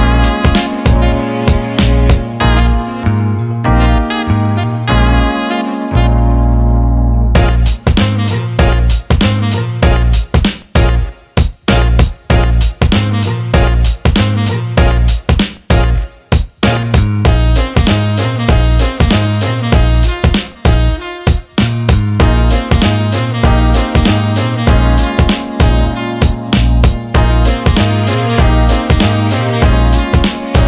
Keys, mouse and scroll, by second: 0.8 click, 4.0 shift+click, 4.4-5.4 alt+middle drag, 6.6 shift+click, 7.4 ctrl+z, 7.9 middle click, 9.6 click, 10.5 alt+middle click, 11.9 ctrl+b, 21.1 alt+shift+middle click, 22.4 click, 22.9 click, 23.4 alt+middle click, 24.2-25.2 alt+middle drag, 25.6 ctrl+z.